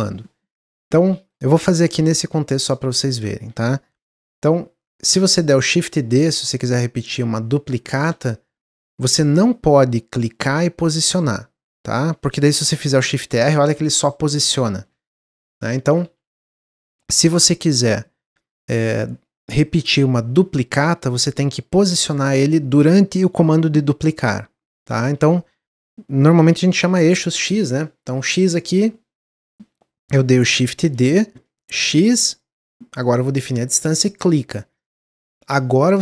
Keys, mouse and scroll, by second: 1.0-2.1 shift+middle drag, 2.1 click, 2.7-5.7 shift+middle drag, 7.9 shift+d, 10.8-12.7 drag, 12.7-14.6 typing, 15.2 ctrl+z, 15.4 ctrl+z, 15.6 ctrl+z, 15.8 ctrl+z, 16.0 ctrl+z, 16.2 ctrl+z, 16.4 ctrl+z, 16.5 ctrl+z, 16.9 ctrl+z, 20.3 shift+d, 30.8 shift+d, 35.7-36.0 typing.